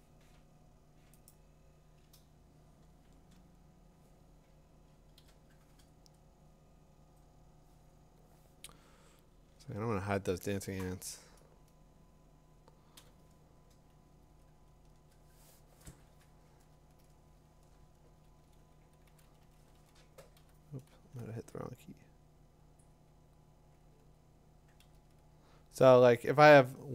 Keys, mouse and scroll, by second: 1.3 click, 5.2 b, 7.0 click, 9.7 ctrl+h, 13.0 b, 15.1 click, 17.8 2, 17.9 6, 19.1-21.3 typing, 25.3 ].